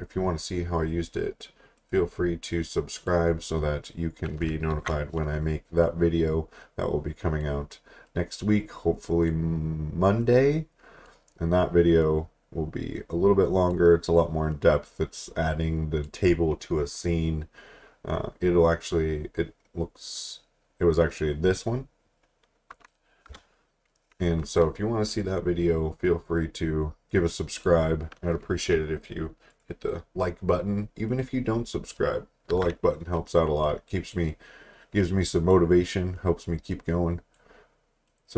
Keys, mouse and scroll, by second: 1.8 right click, 3.0 click, 4.7 ctrl+t, 5.8 click, 23.3 Return, 25.1 click, 29.5 right click, 31.1 click, 32.5 t, 33.6 click.